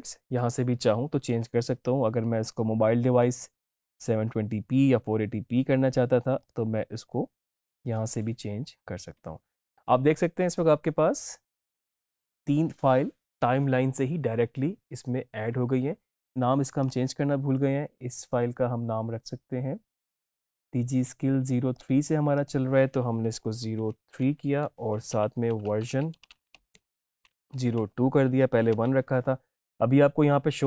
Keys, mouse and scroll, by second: 6.3 click, 16.8 click, 21.6 click, 23.2 Right, 24.6-26.3 typing, 28.3-29.0 typing.